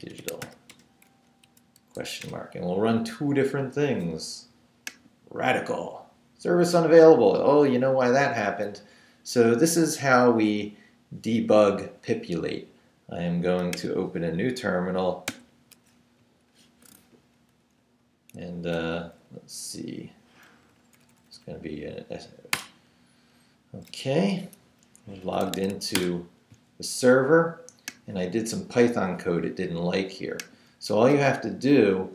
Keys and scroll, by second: 0.0-0.9 typing, 1.2 Up, 1.4 Right, 2.0 shift+/, 2.2 shift+Return, 3.2 Return, 15.3 super+n, 16.2 super+Up, 16.8 Up, 17.8 Down, 20.7 Up, 22.5 Return, 25.0-26.1 typing.